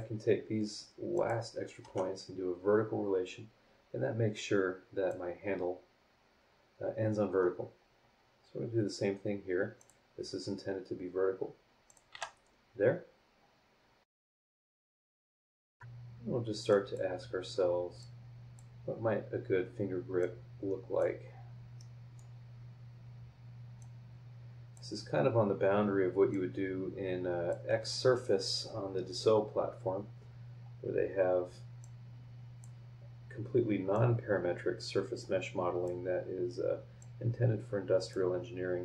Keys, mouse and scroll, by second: 1.1 click, 1.8 v, 4.3-5.3 drag, 7.0-7.7 scroll down 2, 7.8-8.5 scroll up 2, 9.8 click, 11.8 click, 12.1 v, 12.7 scroll down 1, 13.3 scroll up 1, 13.9 scroll down 1, 14.1 middle click, 14.1 scroll up 1, 14.2 middle click, 14.4 click, 14.9 click, 15.4 scroll up 1, 15.5 click, 15.6 click, 16.7 click, 18.0-18.7 drag, 18.7 scroll up 2, 20.2-21.2 drag, 21.2 scroll down 2, 21.8 middle click, 23.8-24.9 drag, 26.3-27.7 drag, 28.9-29.5 scroll down 2, 29.9 scroll up 1, 30.5 scroll down 2, 31.8-32.8 drag, 33.9-36.0 drag, 37.0-38.3 drag.